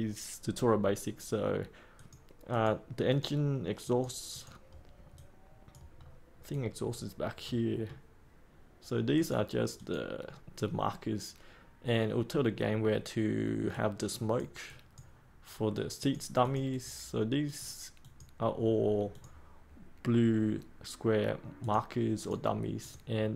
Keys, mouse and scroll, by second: 5.9-6.4 scroll down 1, 6.4 click, 7.4-8.5 middle drag, 9.1-23.3 drag.